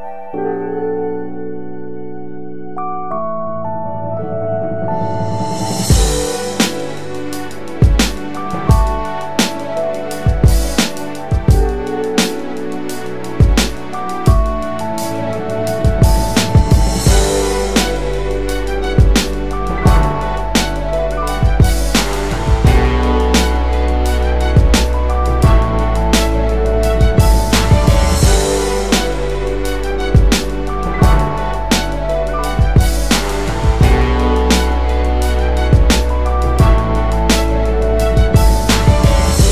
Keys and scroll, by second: 11.9 space, 15.5-16.3 typing, 16.4 Return, 17.4-21.0 typing, 31.3 BackSpace, 33.6 ctrl+z, 37.3-39.5 typing.